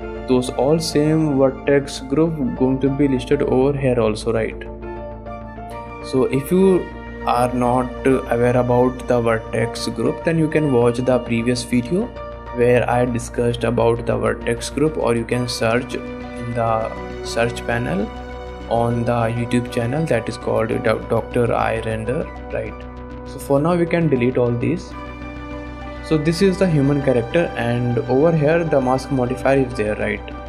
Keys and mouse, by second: 2.2 click, 2.7-5.1 drag, 11.4 shift+click, 12.6 click, 13.2 click, 14.2 shift+click, 16.2 middle click, 22.3 shift+middle click, 24.7 click, 24.9 click, 25.2 click, 25.9 shift+click, 26.3 drag, 26.9 drag, 28.5 click, 30.2 shift+click.